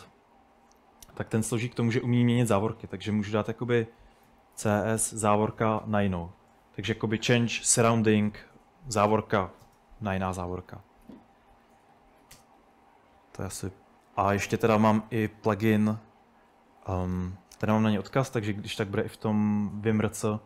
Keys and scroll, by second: 1.3-5.8 typing, 7.9-8.6 typing, 11.1-12.7 typing, 17.5-20.4 typing.